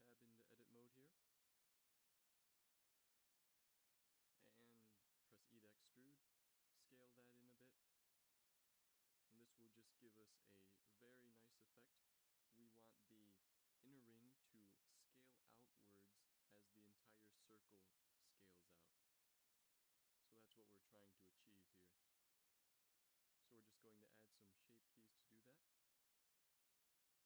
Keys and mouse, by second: 2.1 Tab, 4.0 e, 5.1 s, 12.3 middle click, 13.7 Tab, 19.8 middle click, 20.3-23.5 drag, 23.5 middle click, 25.8 ctrl+s.